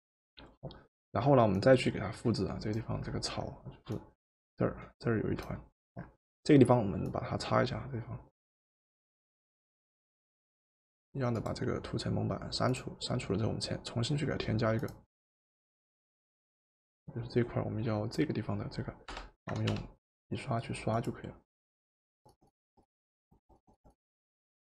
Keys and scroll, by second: 19.1 b, 19.8 b, 22.2 Return.